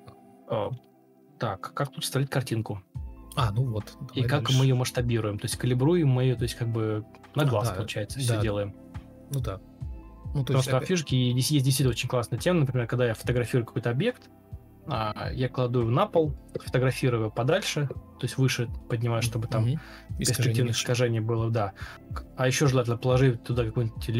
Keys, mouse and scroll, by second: 0.8 ctrl+alt+d, 1.5 ctrl+z, 2.5 ctrl+d, 6.5 ctrl+d, 8.4 ctrl+d, 8.7 Escape, 8.7 Escape, 9.1 ctrl+d, 10.1 Delete, 13.3 ctrl+z, 15.5 ctrl+alt+d, 15.6 ctrl+z, 15.9 Escape, 16.3 ctrl+d, 17.0 Delete, 19.5 alt+shift+c, 20.2 ctrl+space, 21.4 ctrl+space, 23.7-24.1 typing.